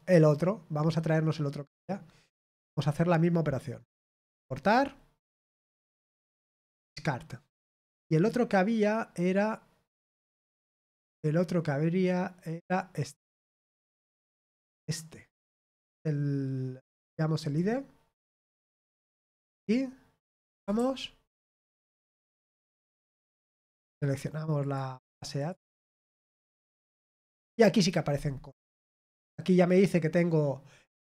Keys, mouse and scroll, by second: 4.7 click, 6.7 click, 8.1 click, 9.9 click, 13.2 click, 17.4 click, 19.3 click, 20.4 click, 21.3 click, 23.9 click, 24.6 click, 25.3 click.